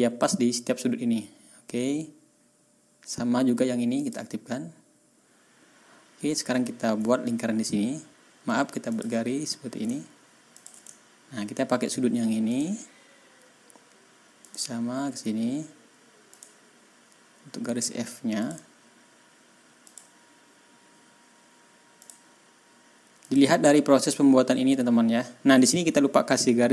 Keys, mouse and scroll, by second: 3.9 click, 6.6 ctrl+scroll up 2, 8.8 click, 10.5 ctrl+click, 10.8 ctrl+scroll down 2, 12.4 ctrl+click, 12.8 ctrl+scroll down 2, 13.0 ctrl+scroll up 2, 14.4 ctrl+click, 16.2 ctrl+click, 18.3 click, 19.8 click, 20.1 scroll down 1, 20.6 scroll up 1, 21.9 click, 23.2 click.